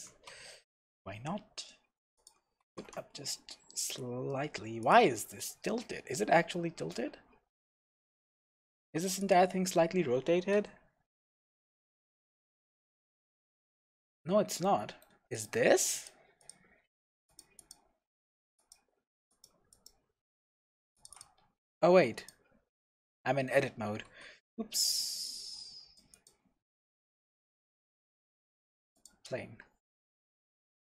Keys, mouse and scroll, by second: 2.3 click, 2.6 g, 4.9 shift+click, 5.3-8.0 middle drag, 7.1-7.4 scroll down 2, 7.7-8.0 scroll up 1, 8.8 Tab, 8.9 middle click, 9.2 click, 10.5 n, 11.9 click, 14.0 n, 14.3-14.6 scroll up 1, 14.6 middle click, 15.3 click, 15.9 click, 16.4 click, 16.8-17.3 scroll up 1, 17.3 click, 18.6 click, 19.3 click, 19.7 click, 20.4 scroll down 1, 21.0 click, 21.2 drag, 21.6 scroll up 1, 21.8 Tab, 22.2 click, 23.2 middle click, 24.1 x, 26.7 Tab, 27.0 middle click, 27.5 shift+a, 29.3-29.9 scroll down 1, 29.9-30.2 scroll up 1, 30.2 KP_0.